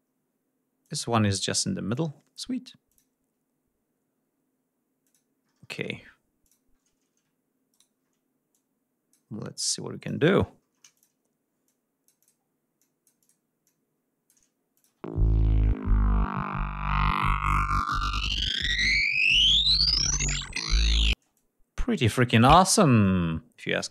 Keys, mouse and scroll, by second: 0.4 click, 1.5 click, 2.5 click, 4.6 click, 6.0 click, 7.3 shift+click, 8.1 click, 9.2 click, 10.2 ctrl+scroll up 2, 10.5 ctrl+click, 11.2 click, 12.4 click, 13.2 click, 14.4 click, 14.5 space, 14.8 ctrl+scroll down 2, 15.1 ctrl+scroll up 2, 20.7 space, 20.9-22.2 drag, 22.6 click.